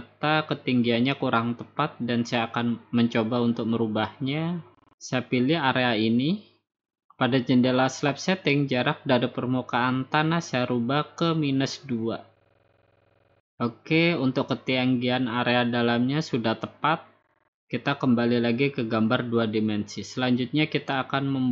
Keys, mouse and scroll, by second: 1.4 click, 1.9 click, 3.2 Escape, 5.8-6.8 drag, 7.4-9.9 drag, 10.1 Left, 11.7 -, 12.4 Return, 14.2 click, 15.1 middle click, 15.1 middle click, 15.3 middle click, 18.7 click, 19.7 middle click, 19.9 middle click, 19.9 middle click.